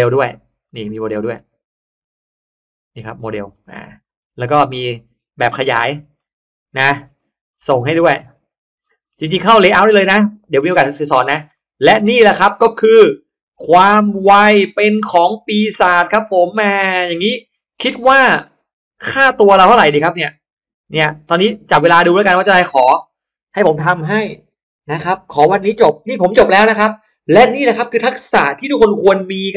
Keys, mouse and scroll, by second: 0.6 click, 2.9 click, 3.3-4.1 scroll down 2, 3.6 middle click, 4.1-4.4 scroll up 1, 4.4 middle click, 4.4-5.1 scroll down 1, 5.1-6.3 scroll up 3, 6.6-7.4 scroll down 4, 7.5-8.5 scroll up 4, 8.7-9.3 scroll down 1, 9.5-9.8 scroll up 1, 9.6 middle click, 9.8-11.0 scroll down 3, 11.2 scroll up 1, 11.4 middle click, 11.9-12.4 scroll down 2, 12.2 middle click, 12.4 scroll up 1, 13.4-14.0 scroll up 1, 13.8 middle click, 14.4 middle click, 14.8-15.4 scroll up 2, 16.3-16.9 scroll up 1, 17.0 middle click, 17.2-18.8 scroll down 2, 19.2 click, 19.8 middle click, 20.4 middle click, 21.9 click.